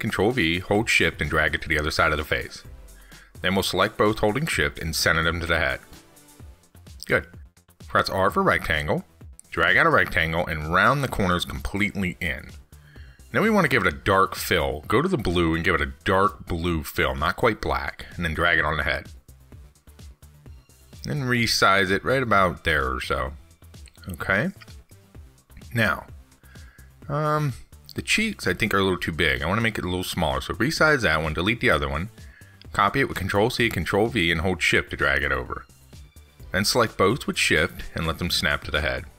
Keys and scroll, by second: 26.0 ctrl+z, 34.4 ctrl+c, 34.6 ctrl+v.